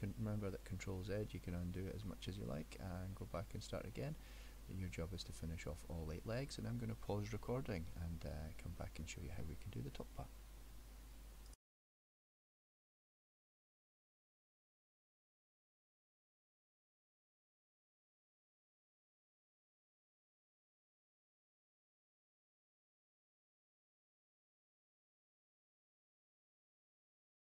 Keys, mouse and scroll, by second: 3.4 middle click, 11.6 middle click, 11.8 click, 11.9 middle click, 12.0 e, 12.8 click, 13.2 click, 13.2-15.5 typing, 13.8 click, 14.5 click, 15.2 click, 15.3 middle click, 17.0 click, 17.2 e, 17.6 click, 18.3 ctrl+z, 18.3 click, 18.5-21.1 typing, 19.2 click, 19.9 click, 20.8 click, 20.8 middle click, 21.7 click, 22.3 click, 22.3-27.4 typing, 22.9 click, 24.2 click, 24.3 middle click, 25.2 click, 25.5 click, 26.1 click, 27.1 click, 27.2 middle click.